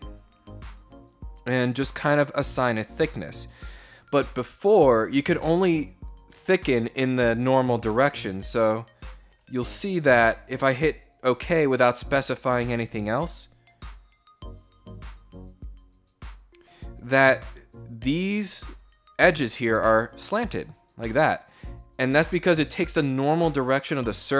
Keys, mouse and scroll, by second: 0.0 click, 1.0 scroll down 1, 1.4 middle click, 1.7 scroll up 1, 1.9-3.1 middle drag, 7.2 scroll down 1, 7.6-8.9 middle drag, 9.3 scroll down 1, 10.8 click, 16.2 middle click, 16.2 scroll down 2, 18.0 scroll down 1.